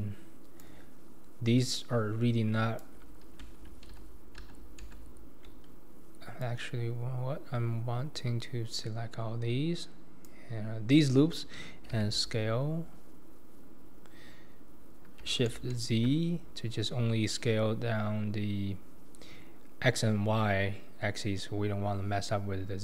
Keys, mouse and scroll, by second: 0.6 click, 1.8 click, 3.9 ctrl+z, 4.4 ctrl+z, 4.8 ctrl+z, 6.4 click, 12.0 s.